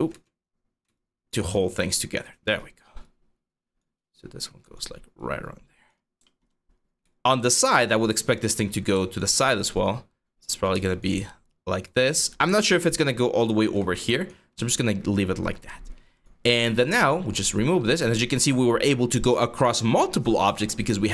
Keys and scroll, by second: 0.0-1.3 typing, 7.3 5, 13.6 g, 14.2 q.